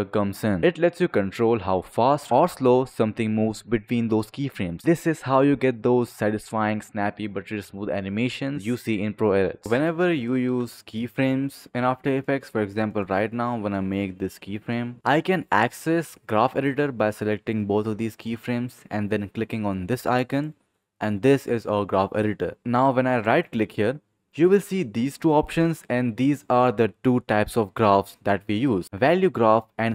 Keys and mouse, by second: 0.3 click, 1.9 click, 3.4 click, 4.1 space, 9.6 click, 9.7 click, 10.5 s, 11.7 click, 12.8 click, 13.4 click, 14.3 click, 15.0 click, 23.2 click.